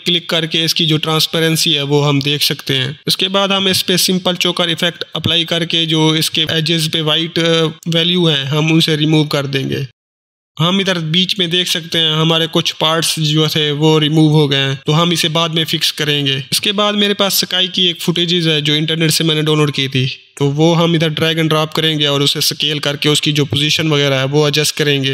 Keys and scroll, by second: 3.0 ctrl+space, 3.5-4.7 typing, 21.6-22.9 typing.